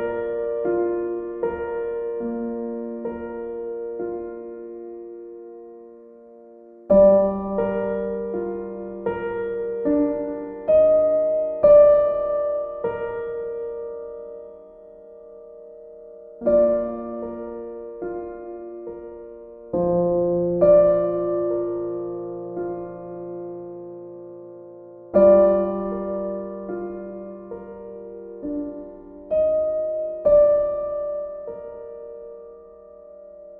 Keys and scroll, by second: 24.0 e, 26.2 ctrl+z, 26.6 ctrl+z.